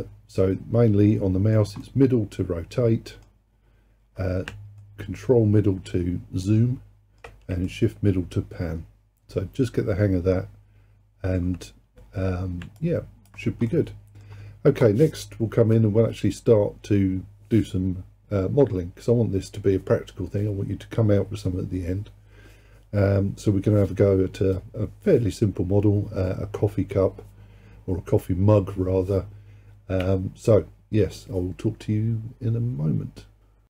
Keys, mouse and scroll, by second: 0.0-10.7 middle drag, 12.8 alt+click, 13.7-16.9 middle drag.